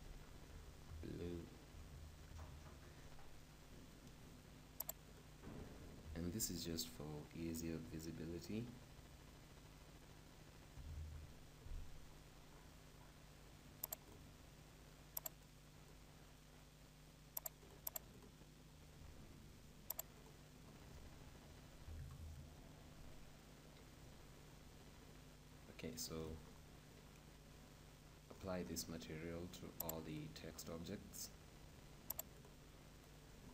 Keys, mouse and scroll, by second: 4.9-6.8 drag, 12.2-14.0 middle drag, 14.0-15.7 drag, 17.6-19.8 drag, 20.0-21.8 drag, 24.2-26.4 middle drag, 26.4-28.2 right drag, 28.1-31.6 middle drag, 29.9-32.5 drag, 33.2-33.5 right drag.